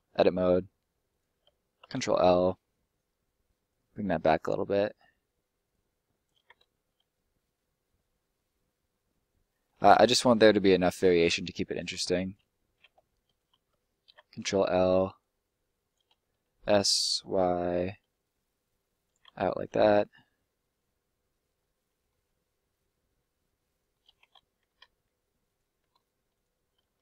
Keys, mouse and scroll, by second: 0.2 right click, 1.4 ctrl+right click, 1.9 ctrl+l, 2.6-3.7 scroll up 1, 3.7 click, 6.8 middle click, 7.0-7.6 scroll down 1, 10.0 scroll up 1, 10.1 middle click, 12.2 right click, 13.2 right click, 13.6 ctrl+right click, 14.0 ctrl+l, 15.1 click, 16.1 s, 17.2 y, 19.0 click, 19.4 scroll down 1, 19.5 middle click, 22.3 middle click, 25.4 right click, 26.3 right click, 26.9 ctrl+right click.